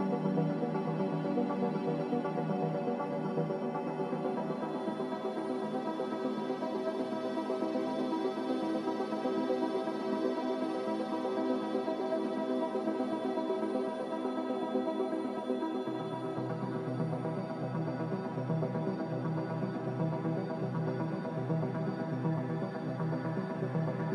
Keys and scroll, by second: 12.3 b, 15.2 typing, 22.2 m.